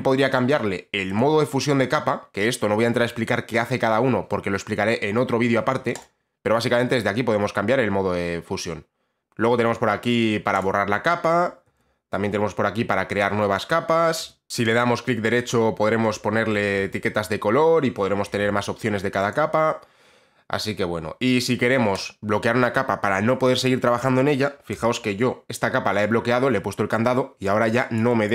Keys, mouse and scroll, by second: 0.6 click, 1.3 click, 6.1 click, 9.2 click, 10.7 click, 11.8 ctrl+z, 13.3 click, 14.3 ctrl+z, 14.5 click, 14.9 right click, 19.4 click, 22.1 click, 24.9 b, 27.6 click, 28.1 click.